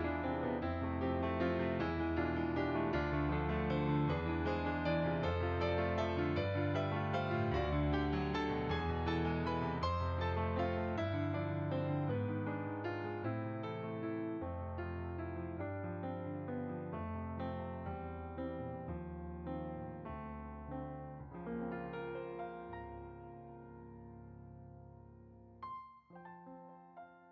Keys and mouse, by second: 0.7 middle click, 1.2 shift+click, 2.2 middle click, 2.7 shift+click, 2.8 shift+click, 3.4 middle click, 4.5 f, 4.7 click, 5.1 click, 5.9 click, 6.1 middle click, 6.9 f, 7.1 click, 12.3 click, 13.2 click, 17.1 middle click, 18.0 shift+click, 19.3 middle click, 20.2 click, 20.8 middle click, 21.5 click, 21.9 middle click, 22.7 click, 23.3 shift+click, 26.6 click.